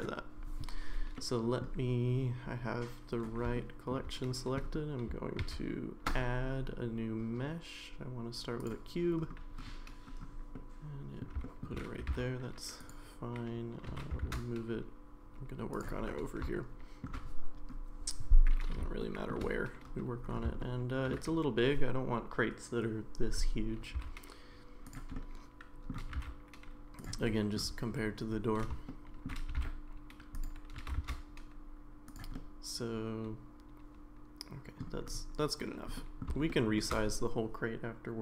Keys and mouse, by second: 1.3 middle click, 3.6-3.9 shift+middle drag, 5.4 shift+a, 10.5-11.2 middle drag, 11.4 shift+middle drag, 12.1 g, 13.9 g, 16.5 middle click, 19.0 shift+middle click, 20.6 shift+middle click, 24.0 s, 25.1 middle click, 26.1 g, 27.3-27.6 middle drag, 28.9-29.3 shift+middle drag, 29.5 g, 30.8 g, 32.4-34.8 middle drag, 36.0 middle drag, 36.5-36.8 shift+middle drag.